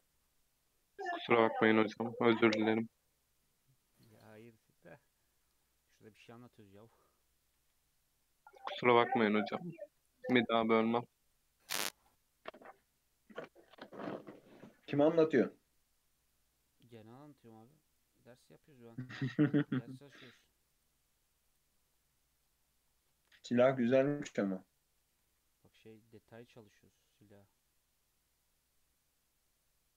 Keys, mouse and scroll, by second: 2.8-3.2 scroll down 2, 4.0-5.0 drag, 5.0 Tab, 5.5 click, 6.4-6.9 middle drag, 6.9 alt+z, 7.2 middle click, 7.5 alt+z, 7.8-8.1 scroll up 2, 8.1-8.8 middle drag, 8.8 Tab, 9.2-9.7 middle drag, 9.7 scroll up 1, 10.0 Tab, 11.2 click, 11.6-11.9 scroll down 2, 11.9-14.9 middle drag, 14.9 /, 15.3 scroll down 2, 15.5-16.2 middle drag, 16.2-16.8 scroll up 2, 16.8-17.6 middle drag, 17.6 click, 18.4 click, 19.4 g, 20.7 click, 21.4 click, 21.9 scroll down 2, 22.1-22.5 middle drag, 22.5-23.0 scroll down 5, 23.0-24.0 shift+middle drag, 24.0 scroll up 2, 24.2-25.0 middle drag, 25.0 g.